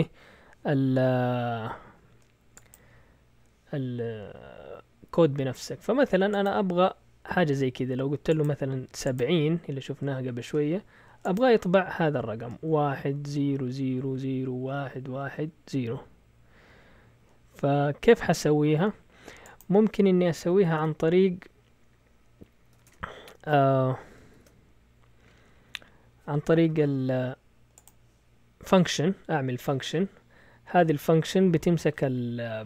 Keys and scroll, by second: 20.4 Escape, 20.7 shift+;, 22.4-23.2 typing, 24.3 ctrl+l.